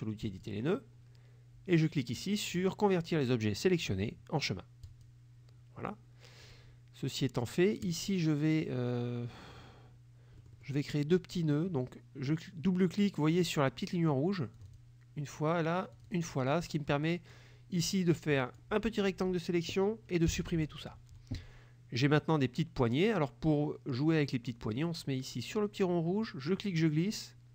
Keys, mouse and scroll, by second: 0.3 click, 4.9 click, 6.5 click, 7.6 click, 10.4 middle click, 14.7 click, 16.0 click, 17.0 click, 18.0 click, 20.4 Delete, 26.3-27.5 drag.